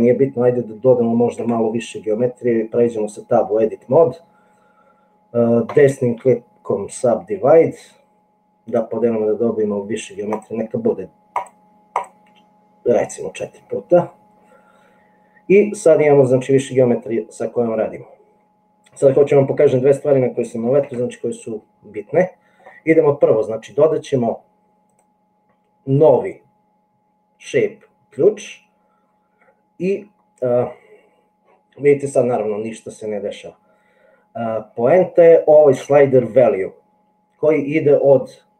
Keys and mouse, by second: 1.6 Tab, 5.8-7.3 right drag, 10.4 click, 11.9 click, 21.0 Tab.